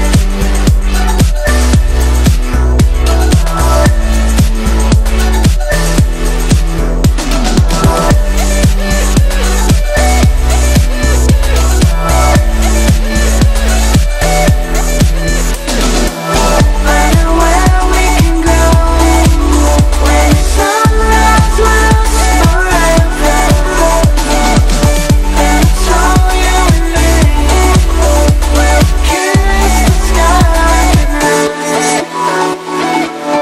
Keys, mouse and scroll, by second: 0.4 click, 2.1 shift+click, 4.5-5.5 shift+drag, 6.9 Down, 7.1 Up, 7.4 Right, 9.1-10.1 shift+drag, 12.2 Up, 13.8 shift+click, 16.3 Right, 17.1 Up, 18.2 click, 20.0 Up, 21.3 click, 21.5-26.0 typing, 21.6 click, 22.4 click, 23.1 click, 23.8 click, 23.9 click, 24.6 click, 25.9 click, 27.8-28.3 click, 28.3 space, 29.0 ctrl+=, 29.7 space, 29.8 click, 30.0-30.3 space, 31.3 click, 31.5 space, 32.0-33.0 drag.